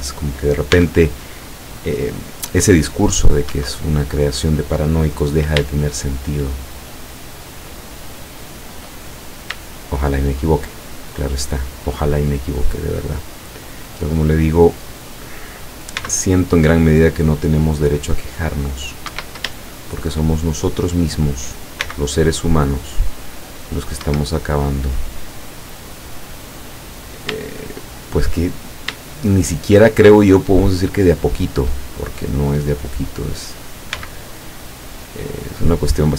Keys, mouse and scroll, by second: 0.8 c, 1.5-3.3 drag, 3.3-3.7 scroll down 1, 3.5 Escape, 6.2 shift+right click, 6.7 shift+right click, 7.9 shift+right click, 8.4 shift+right click, 9.1-9.5 shift+scroll down 1, 9.8 shift+middle click, 10.7 shift+middle click, 11.1 shift+middle click, 12.2-13.2 shift+middle drag, 13.2-13.8 scroll up 1, 14.0-15.5 middle drag, 16.0 c, 16.8-18.2 drag, 19.1 Escape, 19.6-21.0 shift+middle drag, 21.9 c, 22.7-24.1 drag, 24.1 Escape, 24.6 middle click, 27.8 shift+right click, 29.1-30.2 shift+middle drag, 30.5-31.6 shift+middle drag, 32.0-33.4 shift+middle drag, 34.0 c, 35.1-36.1 drag.